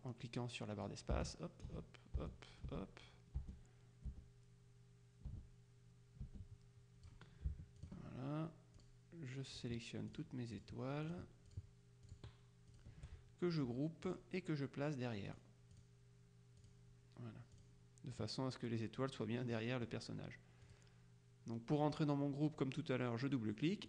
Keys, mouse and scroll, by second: 1.0-7.6 drag, 1.2 space, 2.3 space, 3.5 space, 5.4 space, 6.3 space, 7.9 shift+click, 8.9 click, 9.6 click, 10.6 click, 11.6 click, 14.2 click, 15.4 click, 16.7 click, 17.6 click, 19.6 middle click, 20.7 click.